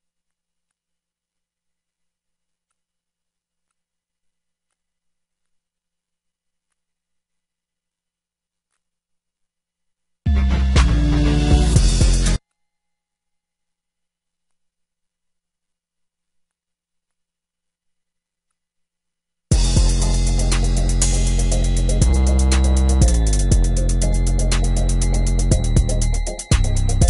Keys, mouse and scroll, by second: 9.5 drag, 9.9 click, 12.5-15.3 right drag, 15.8-16.4 right drag.